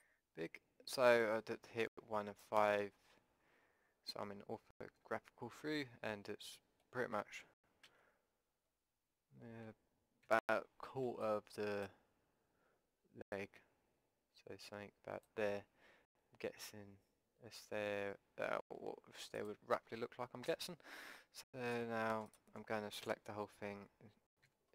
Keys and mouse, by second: 0.0 click, 2.0-11.2 middle drag, 7.9 z, 10.3 a, 10.9 b, 13.3-15.3 drag, 19.4-21.4 drag, 20.5 a, 21.7 b, 22.4-24.0 drag, 23.1 a, 24.4 s.